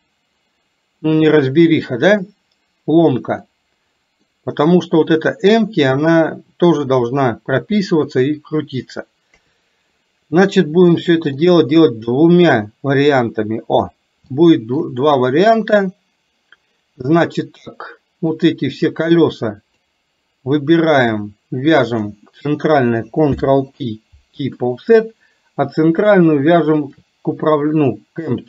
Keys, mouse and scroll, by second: 3.5 middle click, 9.5 KP_3, 10.9 middle click, 14.4 shift+middle click, 18.5-19.9 drag, 22.0 shift+click, 23.4 ctrl+p, 25.6 click.